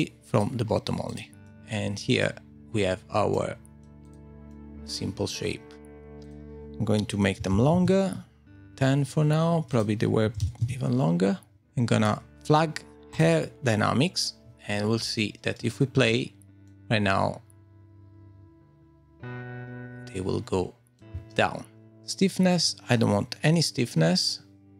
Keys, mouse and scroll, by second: 0.4 click, 1.1 click, 1.4 middle click, 3.3 middle click, 4.0 click, 4.5 middle click, 5.4-6.0 scroll up 1, 6.0 scroll up 4, 6.2 click, 8.4-9.0 scroll down 4, 9.7 click, 11.3 click, 11.3 scroll down 1, 11.6 shift+middle click, 13.1 click, 15.8 space, 16.6 middle click, 21.1 space, 22.3 click, 22.3 scroll down 7.